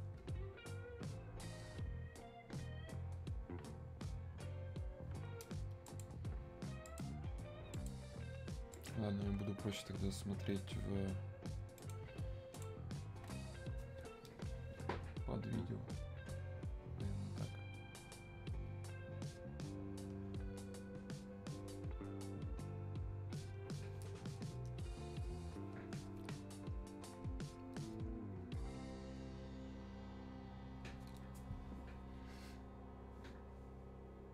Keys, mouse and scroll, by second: 5.9 click, 8.2 Escape, 8.7 click.